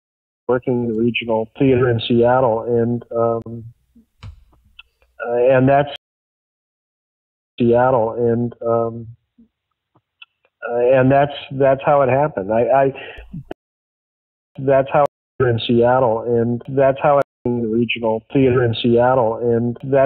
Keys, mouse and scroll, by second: 0.3 click, 0.3 space, 2.4 click, 3.3 Delete, 3.7 click, 4.4 click, 5.8 space, 7.4 click, 7.5 space, 8.9-13.5 drag, 13.4 space, 14.1 ctrl+shift+Delete, 14.5 space, 15.0 space, 15.2 click, 15.3 space, 17.1 space, 17.3 click, 17.3 space, 18.1 click, 18.9-20.0 drag.